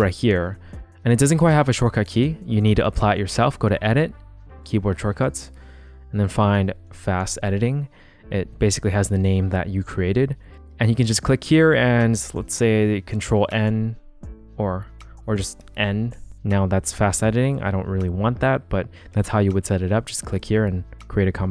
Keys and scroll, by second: 6.0-7.7 typing, 13.0 super+n, 15.5 n.